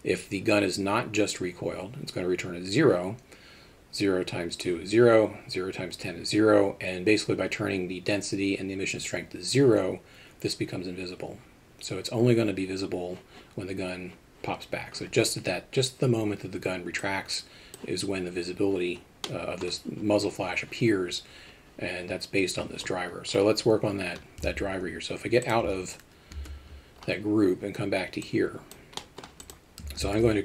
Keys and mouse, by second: 17.2-19.3 drag, 19.3-19.6 middle drag, 26.4 ctrl+Tab, 28.3 click, 29.1 middle click.